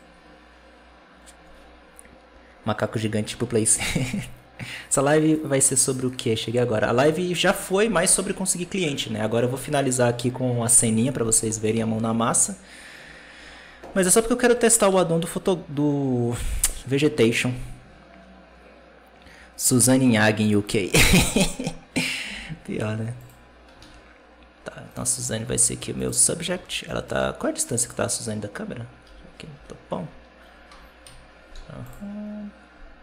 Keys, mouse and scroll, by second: 11.3 g, 13.8 r, 21.8 right click, 22.1 r, 23.7 alt+a, 24.8 right click, 25.3 g, 26.4 alt+a, 26.8 middle drag, 27.0-27.5 scroll down 6, 27.5-28.9 middle drag, 28.9 t, 29.4 t, 30.9 KP_7, 31.4 z.